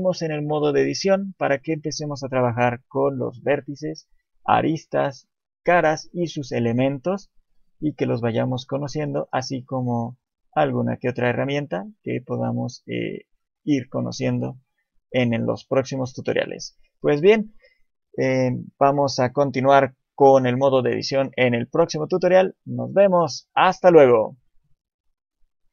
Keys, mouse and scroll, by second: 8.1 shift+middle click, 8.7 scroll up 2, 9.1 shift+middle click, 9.6-10.0 scroll down 1, 10.0 shift+middle click, 11.2 shift+middle click, 12.7 scroll down 1, 13.2 shift+middle click, 15.9 shift+middle click.